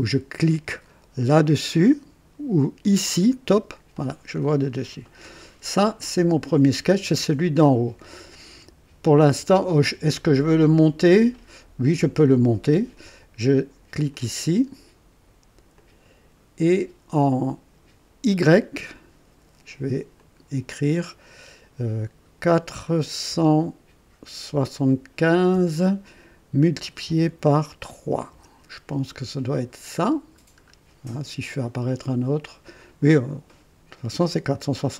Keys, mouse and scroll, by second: 3.3 click, 14.1 click, 15.7 click, 20.1 click, 23.2 KP_4, 24.5 KP_7, 25.5 KP_5, 27.9 KP_3, 28.3 Return, 29.6-30.6 scroll down 3, 34.5 click.